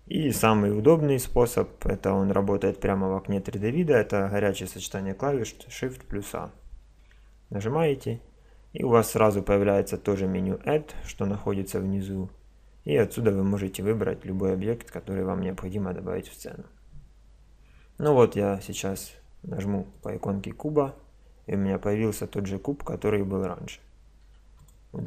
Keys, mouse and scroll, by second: 6.8 shift+a, 20.0-21.8 drag, 24.2 x.